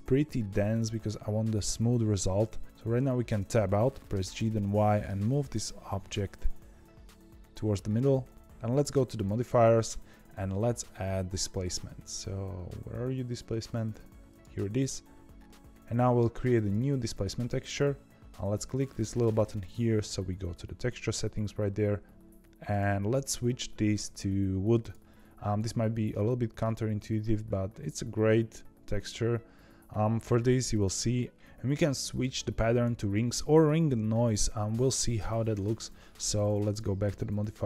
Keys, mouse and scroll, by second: 2.6 middle click, 3.2 Tab, 4.0 g, 8.3 click, 9.1 click, 9.7-12.8 drag, 16.5-21.6 drag, 22.6-25.6 drag, 26.0-29.0 middle drag, 31.3-35.0 drag, 36.6 click.